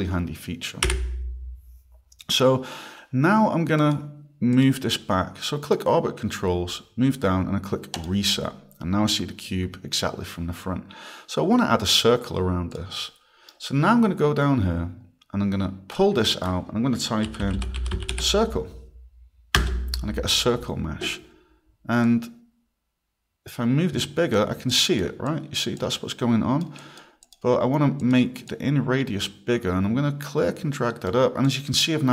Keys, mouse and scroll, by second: 0.8 f, 3.8 click, 4.5 click, 5.7 click, 6.3 scroll, 8.0 click, 12.7 click, 12.9 right click, 14.6 scroll, 16.0 click, 17.0-18.6 typing, 19.6 Return, 22.0 click, 24.7 click, 25.3 click, 25.8 click, 26.8 click, 27.2 click, 28.0 click, 28.5 click, 31.5 click.